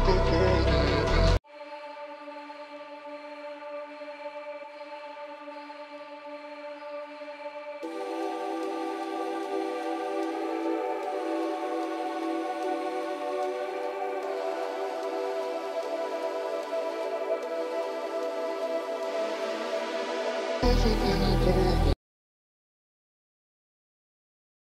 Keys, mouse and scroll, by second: 0.9 typing, 1.0 shift+click, 1.5 double click, 2.1 shift+click, 2.3 shift+right click, 5.1 space, 5.3 1, 5.9-6.3 scroll down 1, 6.4 shift+F2, 6.8 double click, 15.9 F2, 16.3 ctrl+click, 16.5-17.1 typing, 17.7 right click, 18.1 double click, 18.5 shift+click, 19.0 shift+F2, 19.4 double click, 20.0 right click.